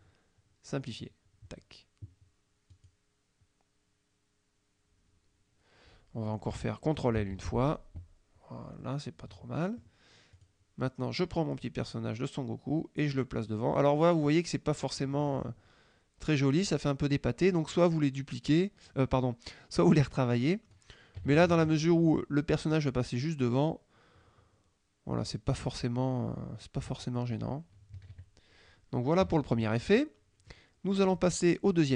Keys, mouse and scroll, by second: 1.0 click, 2.8 click, 7.3 ctrl+l, 8.8-10.0 drag, 10.4 click, 11.7-14.5 drag, 14.9 click, 21.4 KP_Subtract, 22.8-27.3 drag, 28.0 KP_Subtract, 29.3 KP_Subtract, 30.0 middle click, 31.3-31.9 drag.